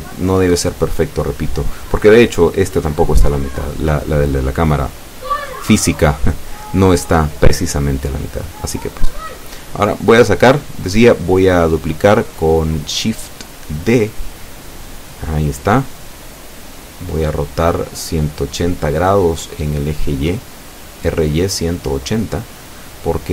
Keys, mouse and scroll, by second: 1.0-2.3 drag, 3.1 ctrl+KP_1, 5.1-8.6 drag, 15.7-16.7 middle drag, 17.5-18.6 drag, 18.8 middle click, 19.4 middle click, 20.6 middle click, 22.9 shift+d.